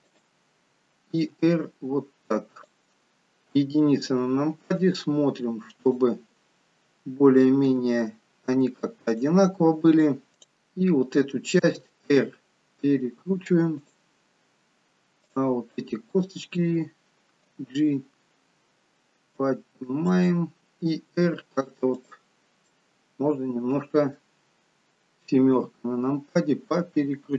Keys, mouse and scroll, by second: 1.4 r, 3.5 KP_1, 5.8 click, 7.7 g, 10.1 middle click, 10.3 click, 11.7 r, 15.2 click, 17.5 g, 21.1 r, 22.7 middle click, 24.6-25.3 scroll down 2, 25.6-26.5 scroll down 1, 25.6 KP_7, 26.5-27.3 scroll up 5.